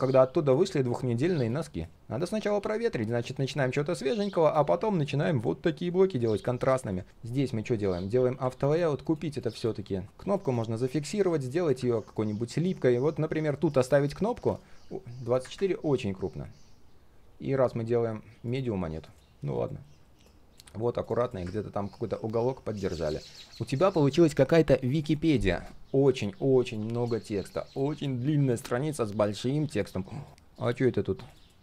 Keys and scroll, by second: 19.6 ctrl+shift+4.